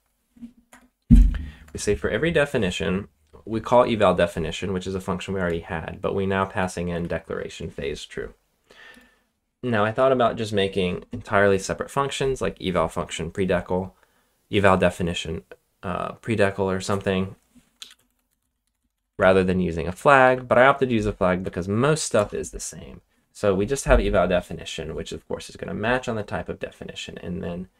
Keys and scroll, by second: 0.6 BackSpace, 1.6 BackSpace, 2.7 j, 6.3 typing, 8.9 typing, 17.5-22.6 typing.